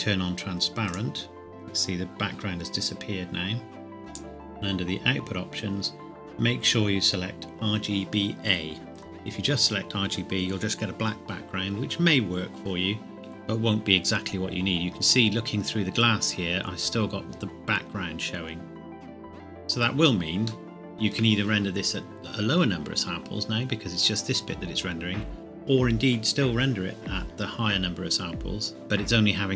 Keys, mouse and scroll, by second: 0.9 click, 4.1 click, 5.0 scroll up 1, 13.7-14.2 scroll down 1, 20.4-20.7 scroll down 1, 20.7 shift+middle click.